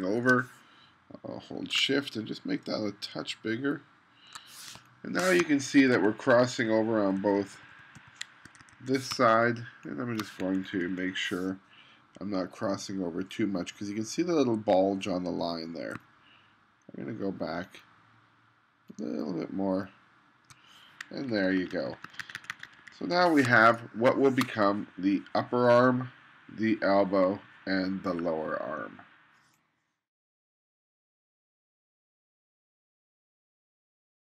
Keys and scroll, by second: 4.8 space, 5.4 2, 7.1 Down, 8.5 1, 9.2 space, 10.6 2, 21.4 1, 23.5 space.